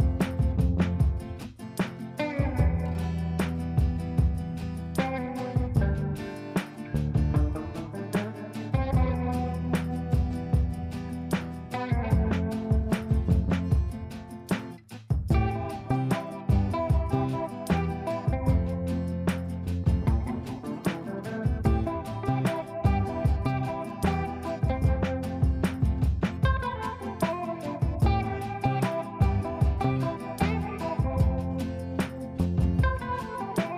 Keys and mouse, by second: 1.2-1.8 shift+drag, 2.9 ctrl+g, 3.3 shift+click, 4.4 c, 4.9 click, 8.0-9.5 ctrl+drag, 9.5 ctrl+space, 10.9-13.1 drag, 15.7-16.6 drag, 23.8 space, 27.2-29.7 drag, 30.5 g, 31.6-33.2 drag.